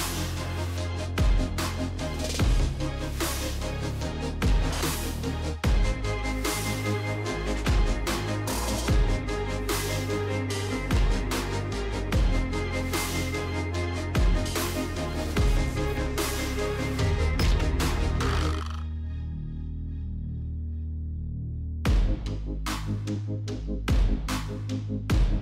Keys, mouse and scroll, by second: 0.0 right click, 2.0 click, 3.7 click, 4.2 click, 6.6-7.8 typing, 8.8 click, 9.0 click, 10.1 click, 11.6-14.6 typing, 15.5 Return, 16.3 space, 17.1 space, 18.0 Return, 19.3 click, 22.3 click, 23.0 space.